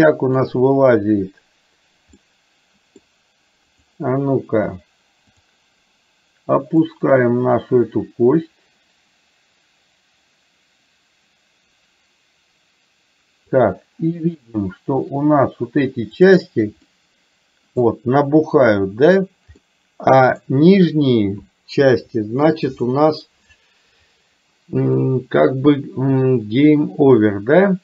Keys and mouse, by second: 0.4 click, 2.3 middle click, 3.8 click, 5.4 click, 6.9 click, 7.4-13.9 drag, 16.2 click, 17.0 middle click, 19.7 middle click, 25.0-27.8 middle drag.